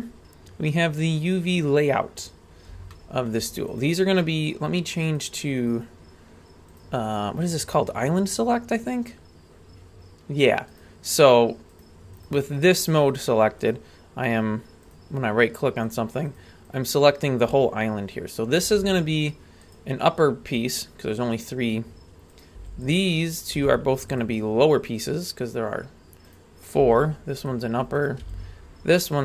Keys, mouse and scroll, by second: 0.6-1.3 scroll up 1, 1.3-1.7 scroll up 1, 1.7-2.7 scroll down 1, 2.9 shift+middle click, 3.7 right click, 5.1 click, 5.7 right click, 7.1-7.5 right drag, 10.7-12.9 right drag, 13.2 right click, 14.9 right click, 15.9-18.7 right drag, 18.7 g, 22.3 right click, 22.5 g, 23.3 right click, 23.5 g, 26.3 right click, 26.8 g, 28.0 right click, 28.2 g.